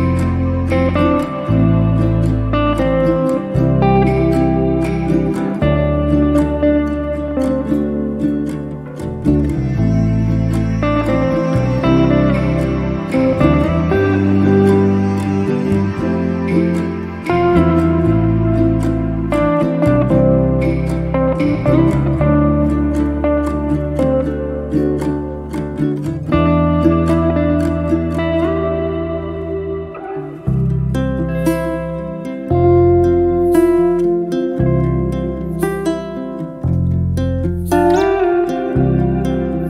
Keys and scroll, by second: 2.8 3, 3.3 0, 3.5 Return, 5.5-6.4 typing, 6.4 Return, 8.6 1, 9.2 Return, 11.5 8, 11.9 Return, 12.9 space, 15.6 r, 18.4 space, 19.7 p, 20.9 2, 21.6 Return, 22.3 space, 29.9 m, 33.0 1, 33.3 KP_Decimal, 33.5 5, 34.0 Return, 36.7 p, 38.2 5.